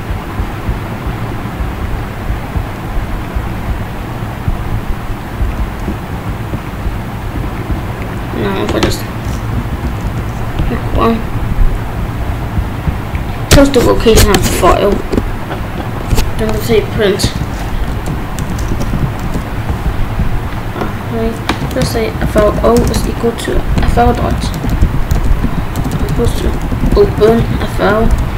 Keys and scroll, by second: 6.1 ctrl+b, 9.5 Down, 10.0 Return, 16.6 Left, 17.5-19.2 typing, 21.6 BackSpace, 22.8-28.1 typing, 28.2 Return.